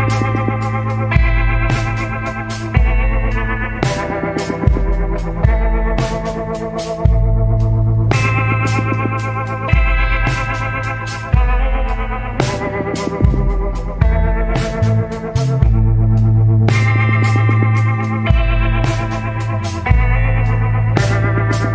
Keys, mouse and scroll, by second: 1.5 scroll down 1, 8.6 scroll down 1, 10.3 scroll up 1, 11.6 scroll up 1, 13.9 scroll up 1.